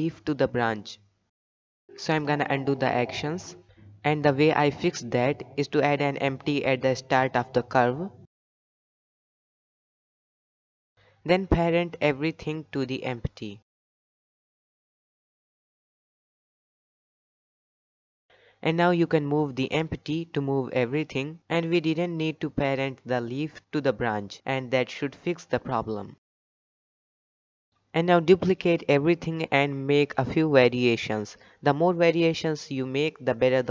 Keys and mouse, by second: 0.2 click, 0.2 g, 0.4 g, 2.6 ctrl+z, 2.8 ctrl+z, 2.9 ctrl+z, 3.1 ctrl+z, 3.3 ctrl+z, 3.5 ctrl+z, 4.4 click, 4.6 middle drag, 4.8-5.1 shift+middle drag, 5.1 click, 5.4 middle click, 5.7 click, 5.8 middle click, 6.3 Tab, 6.7 click, 7.0 shift+s, 8.0 Tab, 11.8 click, 13.3 ctrl+p, 14.1 click, 14.3 g, 15.7 click, 16.0 shift+click, 16.7 shift+click, 17.2 ctrl+p, 18.5 click, 18.7 g, 21.2 click, 22.0 Tab, 22.5 KP_3, 23.0 g, 24.7 g, 25.0 Tab, 25.3 g, 26.7-27.4 middle drag, 27.7 KP_7, 28.5 b, 29.5-29.8 shift+middle drag, 30.3 shift+middle drag, 30.6 shift+d, 33.4-33.7 shift+middle drag.